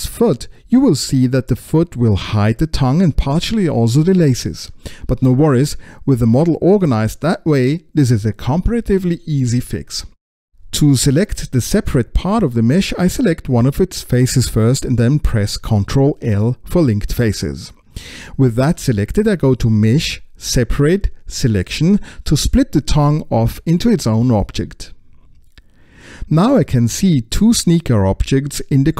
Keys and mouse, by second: 0.0-1.7 drag, 1.7-3.3 middle drag, 5.2-7.1 middle drag, 14.3 click, 19.2 ctrl+l, 20.5-21.6 middle drag, 22.9-26.8 drag.